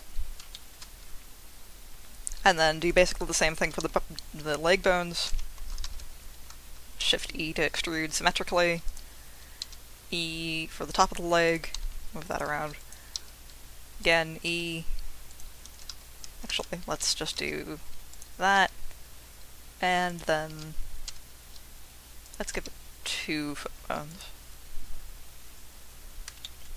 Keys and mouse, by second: 0.5 shift+middle click, 2.9 click, 3.8 e, 5.3 Escape, 5.8 ctrl+z, 7.0 shift+e, 8.8 click, 9.6 e, 10.9 click, 11.4 click, 11.7 g, 12.3 click, 12.8 click, 13.1 e, 14.0 click, 14.4 e, 15.3 click, 15.9 ctrl+z, 16.6 ctrl+z, 17.4 e, 18.1 click, 18.6 e, 20.1 click, 21.1 g, 22.2 click, 22.5 e, 24.1 click, 26.4 shift+click.